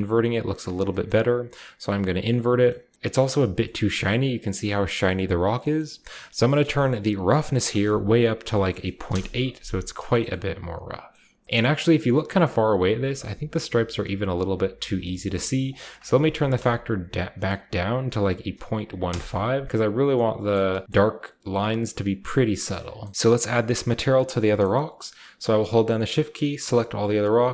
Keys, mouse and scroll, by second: 0.9-1.8 middle drag, 2.7 middle click, 2.9 shift+scroll down 1, 3.2-3.5 shift+middle drag, 3.2-4.7 shift+scroll up 1, 3.8 shift+middle drag, 4.7 shift+middle click, 4.7-5.3 shift+scroll up 1, 5.3-6.3 scroll down 1, 5.4 middle click, 5.6 middle click, 6.3 scroll down 1, 6.4-7.4 middle drag, 6.5-8.2 scroll up 1, 6.5 typing, 7.4-9.1 drag, 8.2 scroll up 1, 8.2-8.9 typing, 9.6-10.9 scroll down 1, 9.9-11.8 shift+middle drag, 10.9-11.8 scroll down 1, 11.8-13.5 scroll up 1, 12.2-13.5 middle drag, 13.5 scroll up 1, 13.6-14.0 scroll down 1, 13.9-14.7 typing, 14.0-14.8 scroll up 1, 14.8-16.4 middle drag, 15.0-15.5 scroll up 1, 16.5 typing, 17.9-18.5 typing, 18.9 Return, 19.6-20.5 scroll down 1, 19.9-22.8 middle drag, 20.5-21.6 scroll up 1, 20.5 a, 21.6-22.2 scroll up 1, 23.1-24.2 scroll down 1, 23.1 s, 23.1 z, 25.2-27.3 shift+middle drag.